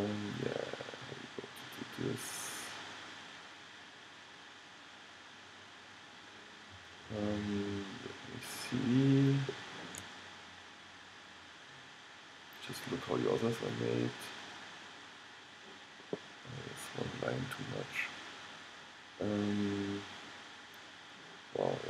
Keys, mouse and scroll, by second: 5.9 middle click, 6.7 middle click, 8.6 middle click, 9.3 middle click, 9.6-12.7 middle drag, 13.6-15.4 middle drag, 16.8-18.6 middle drag.